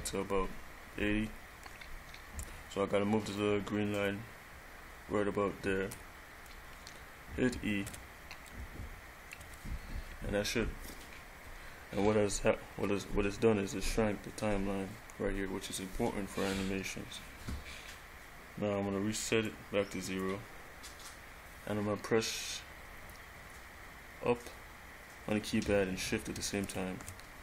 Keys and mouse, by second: 4.1 click, 8.0 e, 9.6 e, 19.7 click, 26.8 shift+Up.